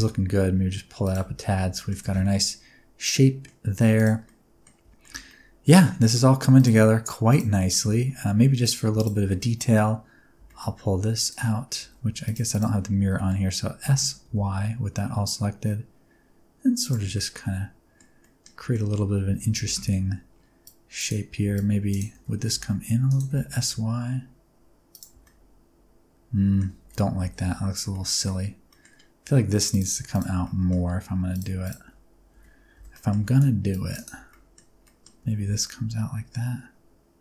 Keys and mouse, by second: 0.9 click, 1.1 Tab, 1.7 shift+middle click, 1.9 alt+a, 2.1-3.4 middle drag, 4.2 middle click, 4.9 shift+middle click, 5.2-6.0 middle drag, 6.5 click, 7.3 click, 7.5 middle click, 7.7 Tab, 8.9 shift+click, 9.1 click, 9.1 right click, 9.2 middle click, 10.3 g, 10.4 middle click, 11.1 click, 11.7 alt+z, 12.2 shift+click, 12.9 alt+z, 13.1 middle click, 13.7 s, 14.2 y, 16.7 click, 17.1 Tab, 17.1-17.9 middle drag, 18.1 middle click, 18.5 Tab, 18.6 middle click, 19.2 alt+z, 19.6 alt+a, 19.7 c, 21.0 click, 21.4 c, 21.8 click, 22.0 alt+z, 22.4 s, 23.0 click, 23.0 x, 23.2 s, 23.5 y, 24.8 click, 25.0 Tab, 25.1-26.5 middle drag, 26.7 ctrl+z, 27.1 ctrl+z, 27.8 middle click, 28.6 middle click, 29.1 1, 29.7 click, 30.0 shift+click, 30.3 middle click, 31.2 click, 32.2 alt+z, 32.7 alt+a, 32.8 middle click, 33.2 c, 33.9 click, 34.1 alt+z, 34.2 middle click, 34.8 middle click, 35.1 s, 35.4 y.